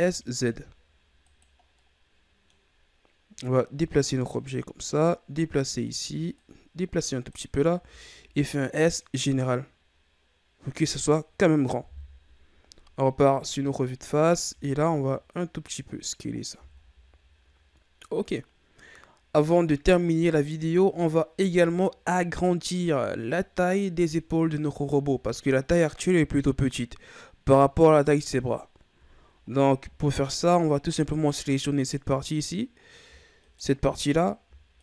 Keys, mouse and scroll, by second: 1.6 scroll down 2, 1.7 middle click, 2.6-3.5 scroll up 2, 3.5-7.7 drag, 7.7 s, 11.8 KP_1, 12.9-13.8 scroll down 1, 13.8-14.3 scroll up 6, 14.4 s, 16.3 scroll down 3, 16.5 a, 16.9-18.4 scroll down 3, 18.4-19.4 scroll up 6, 20.4-24.1 scroll down 9, 29.4-30.8 ctrl+scroll up 8, 30.8 right click, 31.5-32.3 middle drag, 32.3-33.4 scroll up 2, 33.4 shift+right click, 34.7 shift+right click.